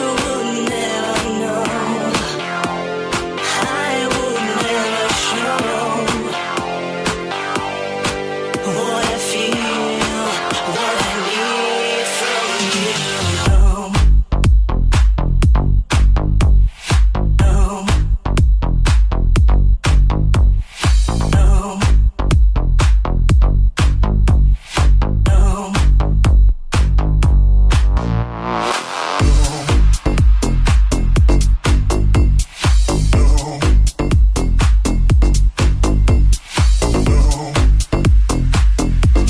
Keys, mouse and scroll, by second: 0.9 alt+z, 1.8 alt+shift+right click, 1.9-6.9 alt+shift+middle drag, 3.2 r, 4.0 g, 6.6 Tab, 6.9 right click, 7.0-11.9 middle drag, 10.4 Tab, 11.0 alt+z, 11.9 alt+right click, 11.9-13.4 alt+middle drag, 13.5 alt+shift+middle click, 13.9 alt+shift+middle click, 14.3-19.0 alt+shift+middle drag, 14.6 alt+z, 15.0 s, 17.7 ctrl+KP_Add, 18.3 alt+z, 18.6 alt+z, 19.0 alt+shift+right click, 19.0-39.2 alt+shift+middle drag, 19.6 s, 21.6 alt+s, 26.6 Tab, 33.5 Tab.